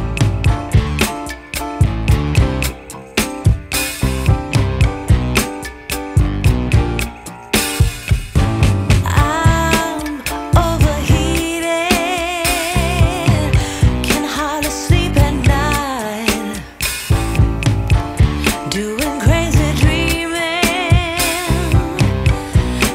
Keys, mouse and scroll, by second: 0.7-3.4 drag, 4.5-7.5 drag, 8.0 ctrl+s, 8.8-11.8 drag, 12.4 ctrl+s, 13.1 click, 14.5 click, 15.7 scroll up 1, 16.7 scroll down 1, 17.8 ctrl+s, 19.8 click, 20.4-22.9 drag.